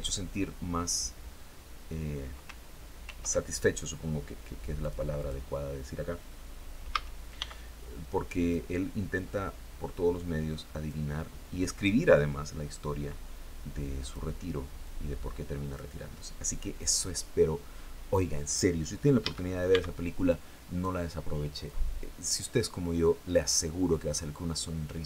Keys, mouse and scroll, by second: 2.5 ctrl+r, 4.3 click, 4.6 click, 6.3 a, 6.8 b, 7.5 click, 8.7-10.5 drag, 11.3-13.7 drag, 14.2-15.4 drag, 18.6 a, 19.1 b, 19.7 click, 21.1-23.0 drag, 23.5 scroll down 1, 24.8 alt+Tab.